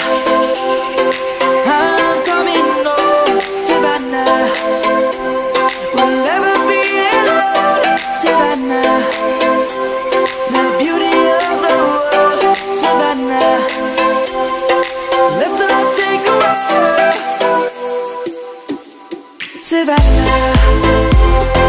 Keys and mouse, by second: 1.3 ctrl+z, 2.5 middle click, 6.3 click, 10.0 click, 10.6 middle click, 11.0 click, 17.5 ctrl+a, 17.9 ctrl+a, 18.1 ctrl+a, 18.4 ctrl+a.